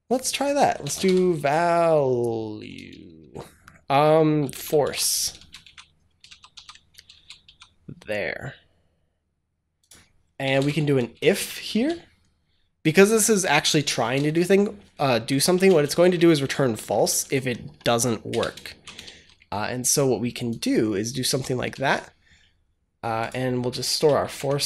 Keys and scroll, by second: 0.4-1.4 typing, 2.5 BackSpace, 4.0-7.3 typing, 6.1 ctrl+z, 10.0-11.6 typing, 13.8 BackSpace, 14.1 shift+0, 15.4 space, 15.6 shift+[, 16.1 Down, 16.6 Up, 17.1 Delete, 17.5 Down, 18.2 Return, 18.5 shift+], 18.9 ctrl+s, 21.2 Tab, 21.6 ctrl+s, 23.6 Return, 24.1 Up, 24.2 Tab.